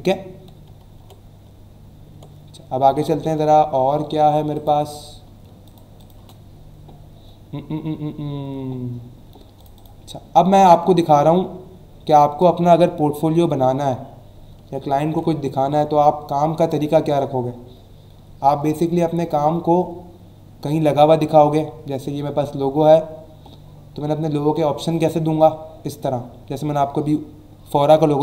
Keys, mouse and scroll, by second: 0.9 ctrl+w, 2.9 Escape, 4.5 click, 4.7 click, 6.2 BackSpace, 9.5 click, 13.5-14.6 ctrl+scroll up 3, 14.9 ctrl+scroll up 1, 15.6-16.0 scroll up 2, 17.4-20.8 scroll down 8, 21.2-21.8 scroll down 2, 22.9 scroll down 1, 23.4-24.5 scroll down 3, 25.0 scroll down 1, 25.8-26.2 scroll up 2.